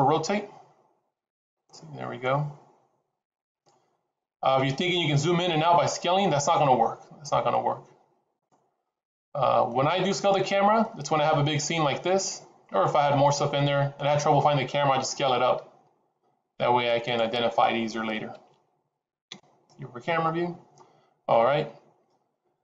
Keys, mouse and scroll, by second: 6.5 s, 8.8-9.2 scroll down 4, 9.2 middle click, 9.9-10.3 scroll down 3, 10.3 middle click, 11.0 scroll down 2, 12.6-12.9 scroll up 1, 14.9 s, 18.5 ctrl+z, 19.2 KP_0, 20.2-20.5 scroll up 4, 21.6-22.2 scroll down 2, 22.2-22.6 scroll down 1.